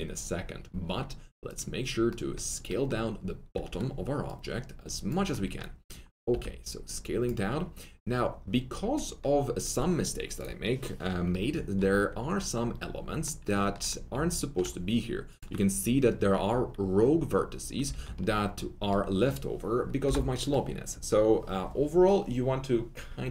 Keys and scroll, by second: 3.5 1, 5.3 1, 6.2 alt+r, 17.9 alt+w, 20.0 BackSpace.